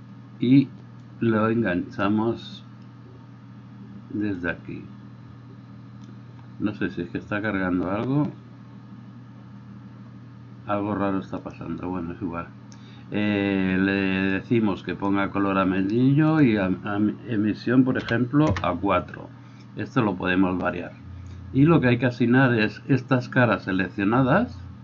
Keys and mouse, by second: 2.8-12.9 drag, 12.9-16.2 middle drag, 16.2-24.8 drag.